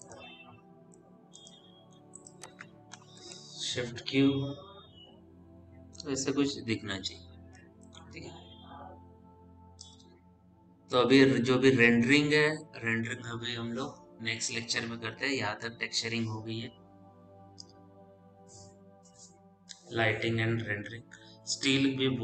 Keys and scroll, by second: 3.6 shift+q.